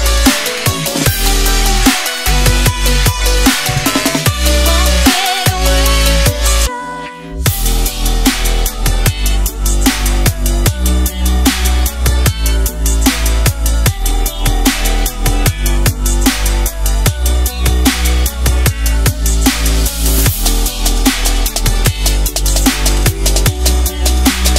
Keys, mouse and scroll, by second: 0.4 Return, 0.8 click, 1.4 Delete, 2.8 click, 4.0-4.5 scroll down 1, 4.5 click, 5.6 click, 21.9 click, 23.6-23.9 scroll up 1.